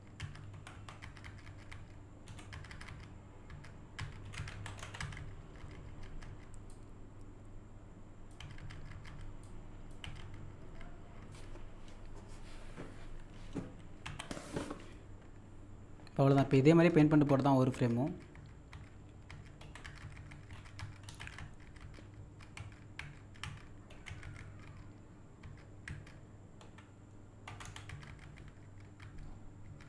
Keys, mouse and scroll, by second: 0.5 Up, 2.3 Right, 4.2 Right, 4.5 Left, 4.7 Up, 4.8 Left, 6.7-8.4 drag, 9.4 click, 14.1 z, 14.9-15.4 scroll up 1, 21.1 Down, 27.6 Left, 27.6-29.6 typing.